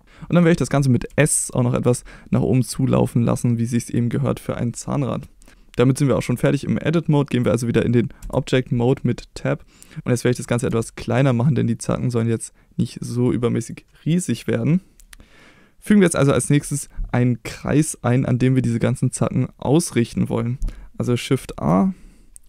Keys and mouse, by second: 0.0 s, 1.0 s, 3.8 click, 8.2 Tab, 10.6 s, 13.6 click, 21.4 shift+a.